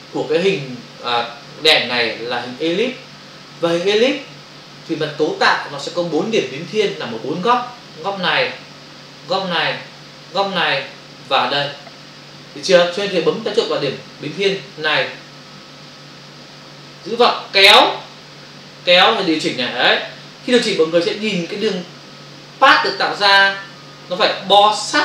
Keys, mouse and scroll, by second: 17.1 click.